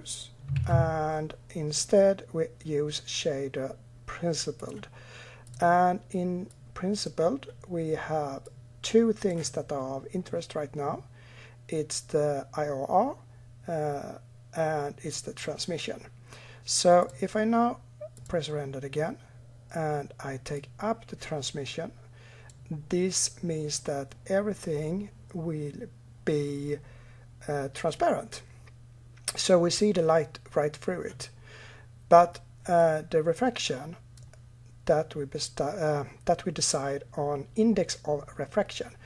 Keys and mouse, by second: 0.4 shift+a, 6.3-8.2 drag, 8.3-10.0 drag, 16.8 click, 18.0 click, 20.4-22.4 drag, 32.6-38.5 drag.